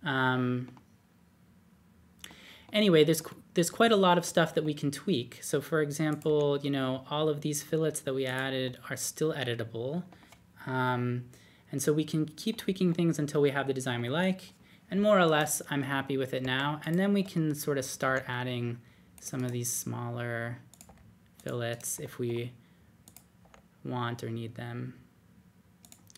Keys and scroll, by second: 6.2 d, 12.3 typing, 16.4 typing, 18.0 d, 19.9-21.8 typing, 23.4-23.7 typing.